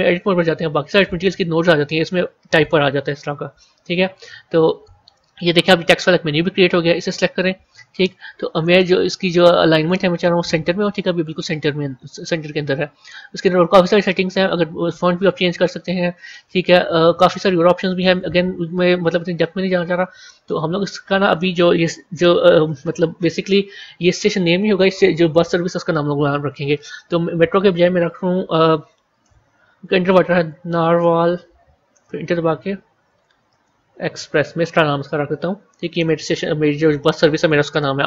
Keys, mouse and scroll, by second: 0.4 Tab, 2.5 BackSpace, 2.7 BackSpace, 3.7 Tab, 6.8 click, 8.0-9.7 scroll down 2, 9.7-12.7 drag, 12.9 scroll down 1, 14.3-16.5 drag, 16.5 scroll down 1, 17.5-20.4 scroll up 9, 20.4 Tab, 22.5 BackSpace, 29.1-30.9 typing, 31.8 Return, 32.8-34.1 typing.